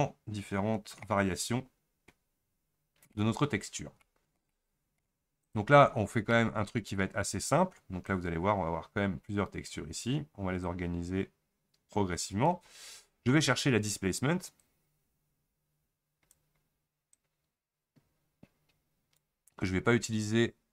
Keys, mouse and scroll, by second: 2.3-2.8 scroll down 6, 2.8-3.2 scroll up 2, 3.2 middle click, 3.6 scroll down 3, 4.0-8.1 shift+middle drag, 8.1 click, 10.6 click.